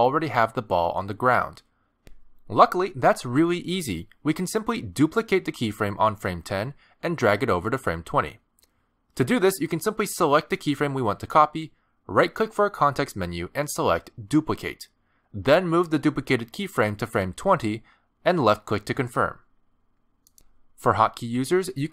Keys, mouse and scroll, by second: 0.1 click, 2.1 click, 3.0 middle click, 4.3 middle click, 6.7 click, 10.8 right click.